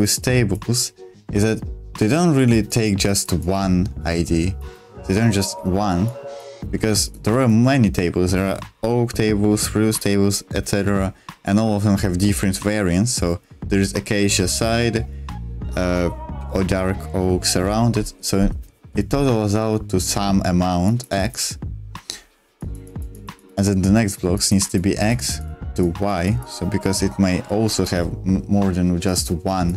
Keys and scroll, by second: 6.8 ctrl+z.